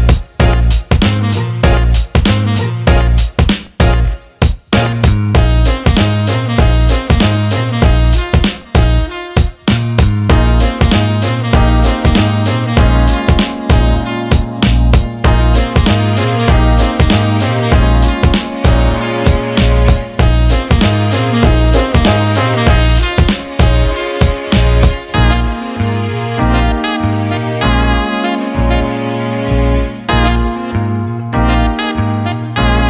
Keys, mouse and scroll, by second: 0.8 click, 2.0 alt+shift+middle click, 2.8 click, 3.6 click, 7.0 click, 8.0 alt+middle click, 9.5 Tab, 12.0 alt+shift+middle drag, 12.5 alt+middle drag, 13.1 alt+middle click, 13.6 click, 14.7 click, 14.9-16.0 drag, 16.5 click, 16.8 alt+middle click, 17.7-18.7 drag, 17.7-18.7 right drag, 19.3 alt+middle click, 19.6 click, 20.3 Tab.